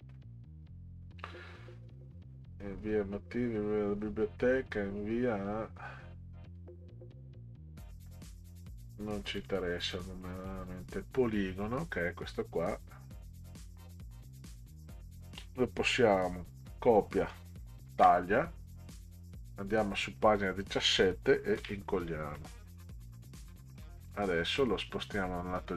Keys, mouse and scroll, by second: 9.4 click, 10.3 click, 16.6 ctrl+c, 17.9 ctrl+x, 19.3 click, 21.6 ctrl+v, 22.4-22.7 middle drag, 24.1-25.7 drag.